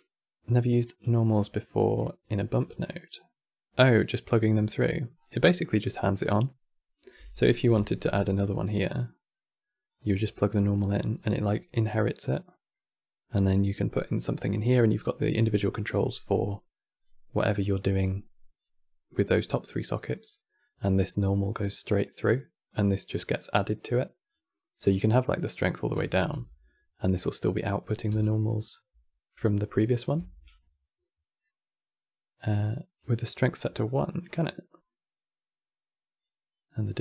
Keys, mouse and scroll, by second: 4.5 middle click, 4.9-5.3 scroll up 9, 5.3 middle click, 5.9 click, 7.1 middle click, 7.5 shift+d, 8.7-9.6 middle drag, 9.6 click, 11.0-14.6 middle drag, 14.6-18.3 drag, 23.1 click, 24.5-25.9 drag, 28.0 ctrl+shift+click, 29.1 ctrl+shift+click, 33.5-37.0 drag.